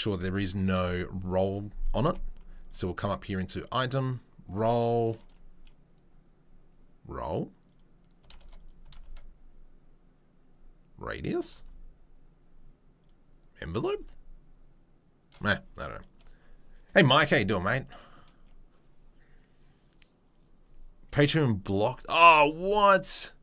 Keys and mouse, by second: 0.7 n, 2.0 n, 2.8 click, 3.3 click, 3.8 click, 7.7-22.8 drag.